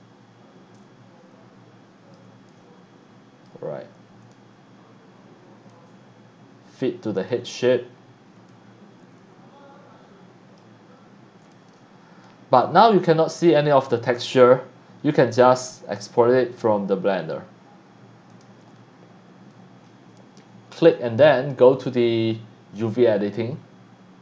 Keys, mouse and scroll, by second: 0.7-2.1 drag, 2.2 x, 2.5 click, 4.3 e, 5.7-7.3 drag, 7.4 a, 8.5-10.6 drag, 10.9 right click, 11.5 c, 11.5 click, 12.6-13.8 drag, 15.4 click, 18.3 click, 19.5-19.9 drag, 20.8 click, 22.8 click.